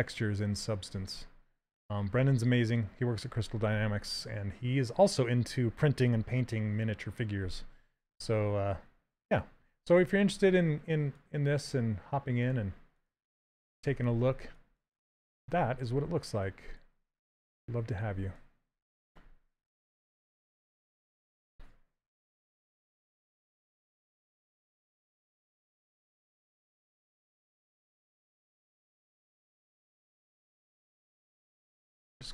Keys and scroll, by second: 29.3 w, 30.6 q, 32.1 s.